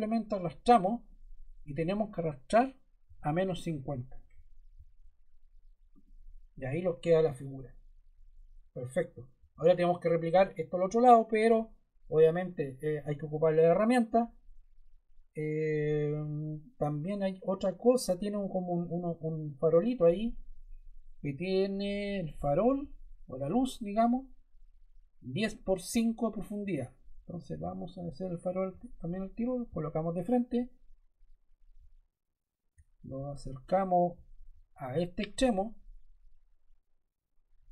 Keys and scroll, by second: 2.9-4.3 typing.